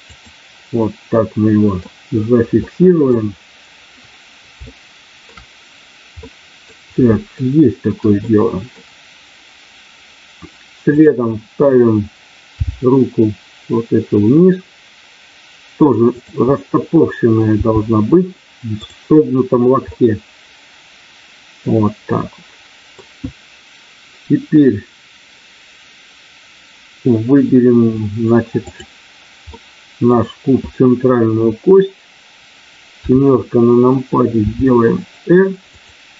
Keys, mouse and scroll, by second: 0.1 click, 0.8 scroll up 1, 1.1 middle click, 2.2 scroll up 1, 2.6 middle click, 4.6 shift+middle click, 6.2 middle click, 7.3 shift+middle click, 8.2 middle click, 10.9 click, 12.6 g, 16.4 middle click, 17.6 g, 19.8-20.2 scroll up 1, 20.2-21.7 middle drag, 22.1-22.9 scroll up 1, 28.7 click, 29.5 middle click, 33.0 KP_7, 34.5 r, 35.7 click.